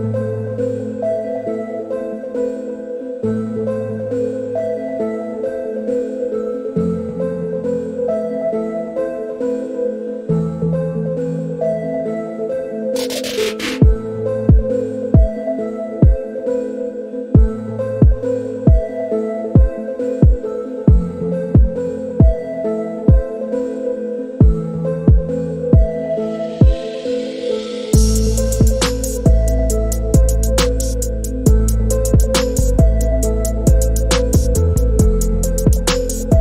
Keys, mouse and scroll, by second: 0.2 click, 3.7 i, 6.8 click, 7.6 click, 8.8 click, 9.4 click, 17.2 click, 20.1 click, 22.6 click, 28.8 click, 31.4 click, 34.2 click.